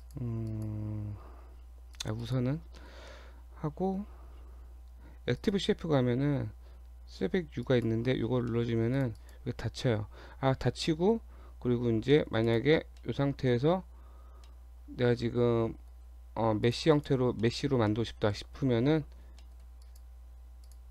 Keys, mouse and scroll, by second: 0.0 click, 0.5 click, 2.0 click, 2.2 click, 2.8 shift+middle click, 3.5-5.3 scroll down 12, 5.3 scroll down 1, 5.4 click, 7.6 click, 8.5 shift+middle click, 8.7 shift+scroll up 1, 9.0 click, 9.2 click, 10.6-12.1 scroll up 14, 12.1 middle click, 12.5 click, 12.7 Tab, 13.0 middle click, 13.7 Tab, 14.0-14.3 scroll up 2, 14.3 Tab, 14.5 middle click, 15.9 scroll down 1, 16.3 Tab, 16.7 click, 16.9 click, 17.4 shift+middle click, 17.9 middle click, 19.4 middle click, 19.9 click, 20.2 Tab, 20.7 click.